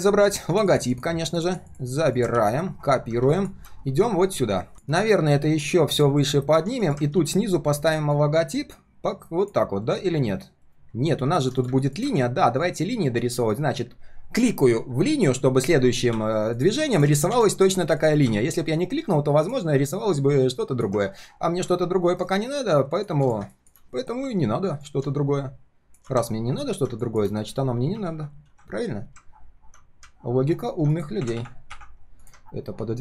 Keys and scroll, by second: 2.3 ctrl+c, 7.1 ctrl+v, 9.8 ctrl+shift+4, 10.6 ctrl+shift+4.